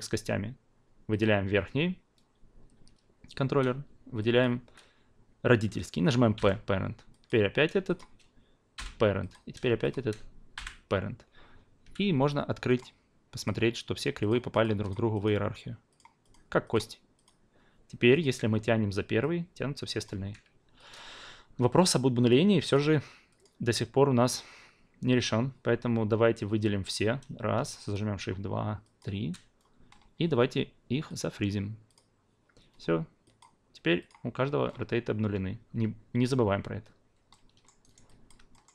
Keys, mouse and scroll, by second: 1.1 click, 4.4 shift+click, 9.2 click, 9.8 shift+drag, 10.5 p, 11.8 f, 12.6 click, 13.3 click, 14.2 click, 14.5 click, 14.8 click, 15.1 click, 15.9 click, 16.2 click, 16.6 click, 17.2 click, 18.1 click, 19.2-20.2 drag, 20.2 ctrl+z, 20.9 alt+click, 21.8 click, 22.2-26.6 drag, 27.7 shift+drag, 28.8 shift+drag, 31.0 click, 31.9 click, 33.2 drag, 34.0 click, 37.5 alt+middle drag, 37.8 alt+right click, 38.0 alt+drag, 38.5 alt+middle drag.